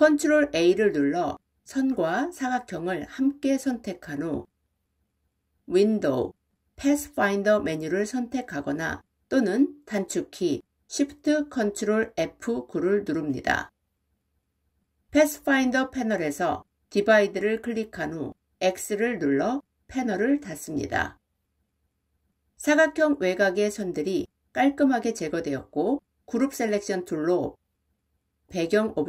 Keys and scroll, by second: 0.0 ctrl+a, 9.3 ctrl+shift+F9.